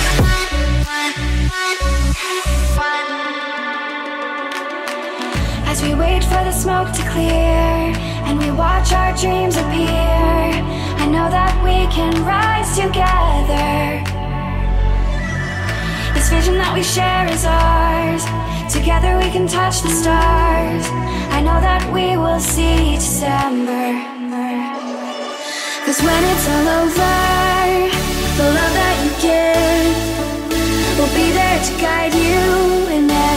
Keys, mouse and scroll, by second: 1.2 click, 2.7 g, 3.5 z, 5.0 click, 5.4 click, 6.8 e, 8.4 click, 9.0 ctrl+z, 10.1 g, 10.7 z, 13.3 click, 14.4 click, 14.7 middle click, 16.0 KP_1, 17.2 e, 18.0 z, 19.0 click, 19.6 click, 20.9 e, 23.3 click, 24.3 e, 26.0 click, 26.7 click, 27.5 e, 32.5 click, 33.0 e.